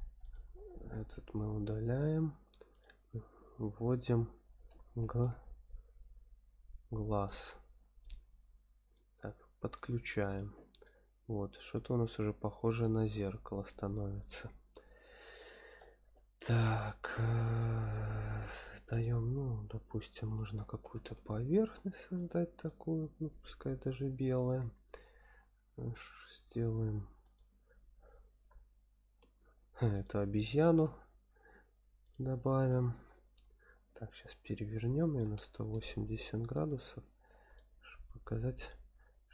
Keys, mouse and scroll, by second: 0.2 click, 1.1 x, 2.2 shift+a, 8.9-9.8 drag, 10.8-12.8 middle drag, 13.3-13.9 scroll up 1, 14.2-14.9 scroll down 1, 14.9 scroll down 1, 17.0 shift+a, 20.2 s, 20.8 KP_1, 21.0 KP_0, 21.6 KP_Enter, 22.6-24.3 middle drag, 25.2 shift+a, 28.4 g, 29.2 z, 30.2 click, 30.6 g, 31.0 y, 32.0 click, 32.0 y, 33.0 KP_7, 33.7 scroll down 2, 34.3 r, 35.0 KP_1, 35.3 KP_8, 35.3 KP_0, 35.7 KP_Enter, 36.5-37.2 middle drag, 37.2-37.5 drag, 38.3 g.